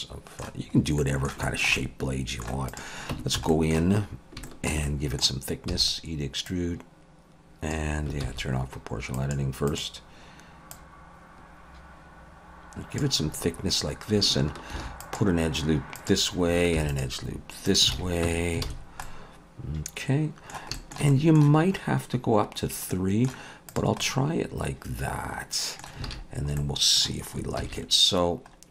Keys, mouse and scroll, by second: 0.6-1.0 scroll up 2, 1.0 middle click, 1.4 shift+middle click, 1.8 middle click, 2.7 click, 3.1 Tab, 3.4 a, 3.5 middle click, 4.0-4.4 scroll up 2, 4.4 middle click, 4.8 middle click, 5.7 e, 6.5 click, 8.3 ctrl+z, 9.2 click, 9.7 click, 10.7 click, 13.3-14.1 scroll up 3, 14.7 ctrl+r, 16.8 ctrl+r, 18.0 alt+a, 18.3 Tab, 18.7 alt+a, 18.8-19.7 scroll down 3, 19.0 middle click, 20.8 shift+middle click, 21.1 middle click, 22.9 middle click, 23.7 shift+middle click, 23.7 click, 24.0 middle click, 26.1 alt+a, 26.3 scroll down 2, 26.6 middle click, 27.6 ctrl+s.